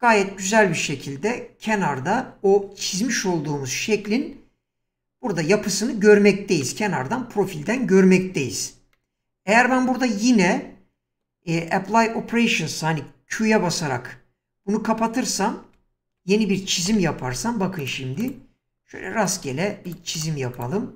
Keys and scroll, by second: 13.5 q, 15.8 ctrl+z, 16.9 1.